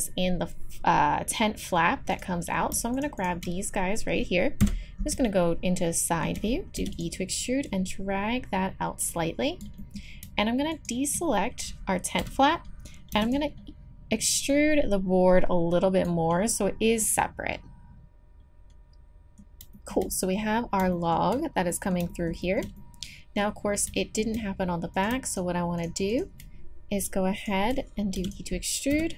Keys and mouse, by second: 2.1-9.5 drag, 4.6 KP_3, 6.7 e, 9.5 middle click, 9.8-12.5 drag, 12.2 KP_3, 12.5 middle click, 13.1 e, 14.5-15.6 drag, 16.0 click, 17.2 click, 17.6-18.9 middle drag, 19.7-20.9 middle drag, 21.0 middle click, 22.4 middle click, 24.2 middle click, 24.9-28.2 drag, 28.1 e, 28.9 KP_3.